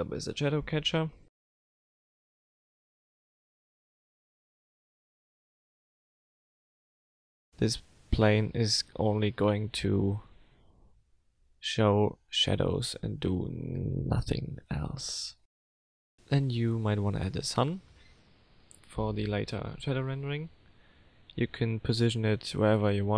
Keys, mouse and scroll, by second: 0.8 click, 0.8-1.1 scroll up 3, 2.6 click, 3.9 click, 5.6 click, 6.0-6.5 scroll down 2, 6.8 click, 7.2-8.4 scroll down 3, 8.4 click, 9.8 click, 11.5 scroll up 3, 14.8 F3, 19.4 Down.